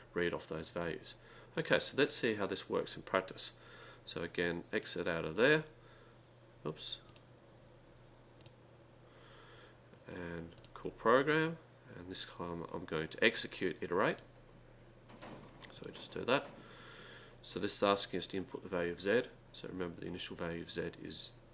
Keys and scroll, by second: 5.4 ., 7.1 3, 8.4-9.6 typing, 10.6 ., 14.1 5.